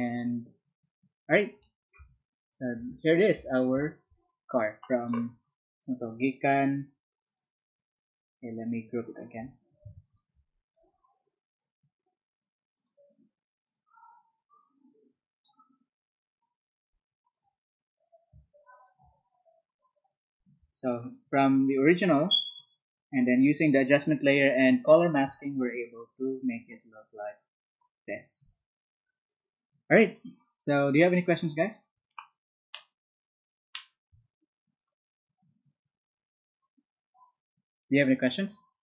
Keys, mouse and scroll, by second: 7.2 ctrl+click, 8.9 ctrl+click, 10.0 shift+click, 10.7 shift+click, 12.7 shift+click, 13.6 shift+click, 14.0-15.4 shift+drag, 17.3 shift+click, 18.7 shift+click, 19.9 shift+click, 21.0 shift+click, 26.6 shift+click.